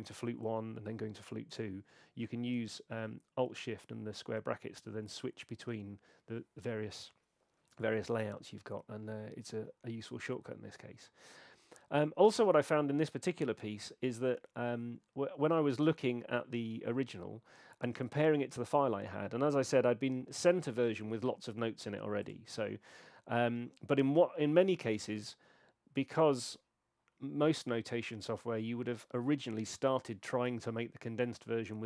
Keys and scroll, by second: 0.2 alt+shift+], 1.5 alt+shift+[, 2.5 alt+shift+[, 5.6 alt+shift+[.